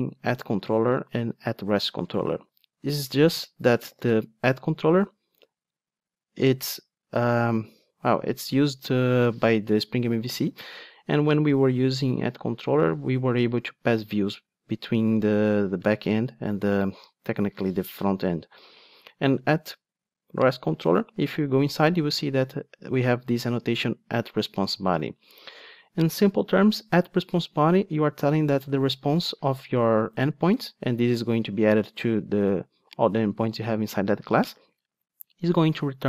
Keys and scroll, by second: 4.0 super+b, 16.9 ctrl+Tab, 21.3 super+b.